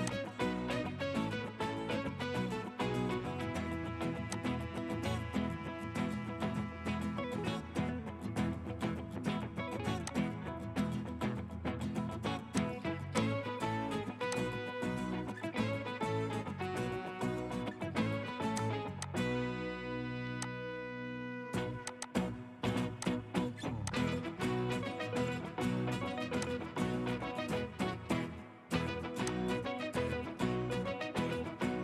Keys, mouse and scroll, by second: 19.1 double click.